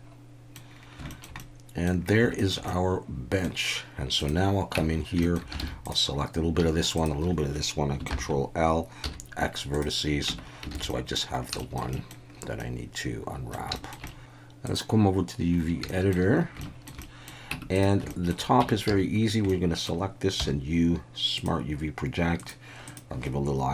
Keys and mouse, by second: 1.1 shift+middle click, 1.4-1.8 middle drag, 2.4 shift+middle click, 2.7-3.4 middle drag, 4.8 Tab, 5.2 shift+middle click, 5.6 alt+a, 5.8 click, 8.1 ctrl+l, 9.0 x, 10.3 Tab, 10.7 alt+a, 10.9 drag, 11.6 shift+click, 11.9 click, 12.6-13.2 middle drag, 13.2 click, 13.3 middle click, 13.7-23.7 shift+middle drag.